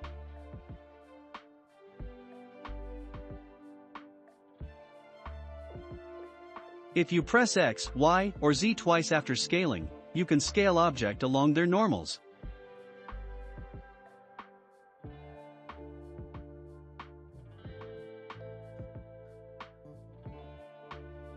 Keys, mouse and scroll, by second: 0.6 scroll up 2, 1.5 click, 3.1 r, 6.4 s, 9.7 s, 14.4-17.4 drag, 20.3 click.